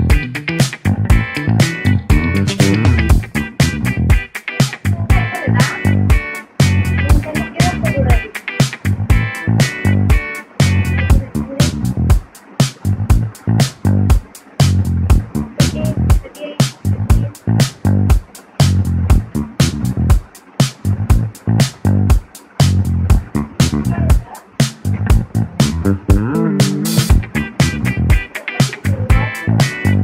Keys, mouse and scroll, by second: 1.2-1.6 scroll up 1, 2.1 middle click, 2.8 scroll up 1, 4.9-6.0 middle drag, 6.0 click, 20.8-21.9 middle drag, 21.9 click, 23.0-23.4 scroll up 1, 23.4-24.5 middle drag, 24.5-25.7 scroll up 2.